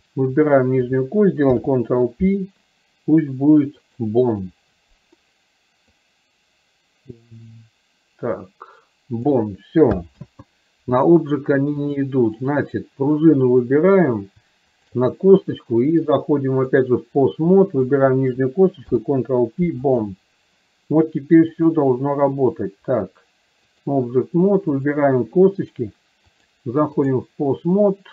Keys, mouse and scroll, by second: 0.1-0.5 drag, 1.5 ctrl+p, 5.9-9.3 drag, 11.9-12.6 drag, 13.5 click, 14.8 shift+click, 16.3-17.0 drag, 17.6-18.0 drag, 21.6-24.1 drag, 24.9 click, 26.3-27.3 drag.